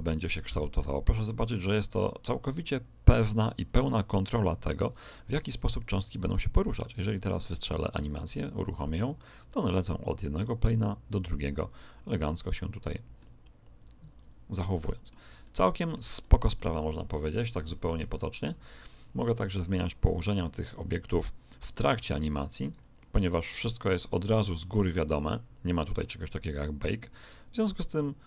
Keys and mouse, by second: 5.8 click, 7.8 alt+a, 10.4-12.2 middle drag, 13.2-15.0 middle drag, 15.4-18.6 middle drag, 18.0 right click, 20.1 Escape, 21.9 alt+a, 22.6 right click, 23.2 r.